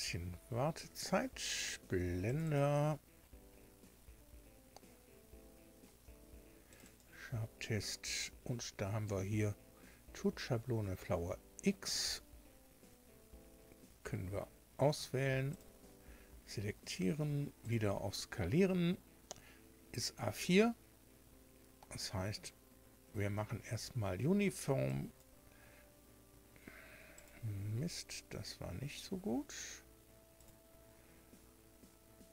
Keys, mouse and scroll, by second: 0.6 scroll down 1, 2.2 click, 3.0 scroll down 1, 5.0 scroll down 1, 6.6 click, 11.8 click, 15.4 click, 17.5 click, 24.8 click, 27.1 click, 30.3 click.